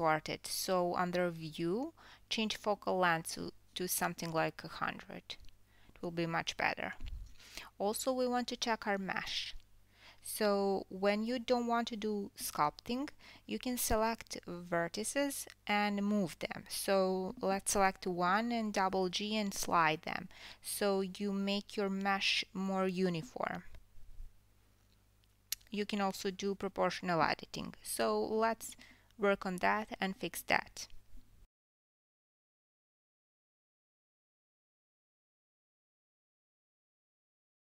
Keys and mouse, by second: 1.4 click, 2.6-7.0 drag, 4.1 KP_0, 8.8 click, 9.4-10.2 drag, 10.2 KP_1, 11.1 Tab, 11.4 Tab, 19.5 Tab, 20.1 Tab, 20.9 1, 22.3 click, 23.5 g, 25.2 click, 25.4 g, 26.7-33.4 middle drag, 26.7 click, 27.0 g, 28.3 click, 28.4 g, 29.5 click, 29.8 g, 31.0 click, 31.7 click, 32.0 g, 33.4 click, 33.5-36.0 middle drag, 34.6 g, 35.6 g, 36.0 click, 36.9-37.7 middle drag, 36.9 g, 37.3 g.